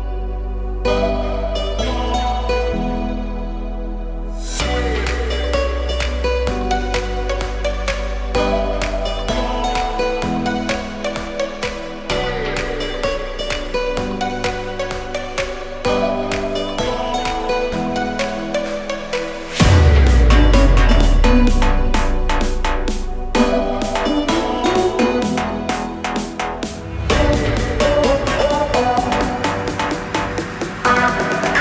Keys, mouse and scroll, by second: 1.0-3.3 drag, 6.5 click, 7.0 click, 7.6-11.5 drag, 17.7 shift+t, 22.1 space, 24.8-26.1 drag, 27.9-31.5 drag.